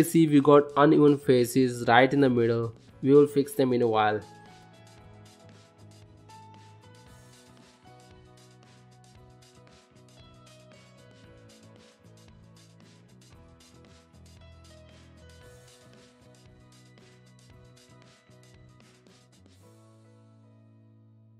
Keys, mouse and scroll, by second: 1.0 g, 4.3 g, 6.2 middle click, 7.0 shift+middle click, 7.5 middle click, 7.9 click, 8.3 g, 10.7 shift+middle click, 11.2 ctrl+middle click, 11.5 middle click, 13.0 shift+middle click, 13.7 shift+middle click, 14.1 middle click, 14.9 ctrl+middle click, 15.4 middle click, 16.5 g, 18.4 g, 20.6 middle click, 21.1 ctrl+middle click.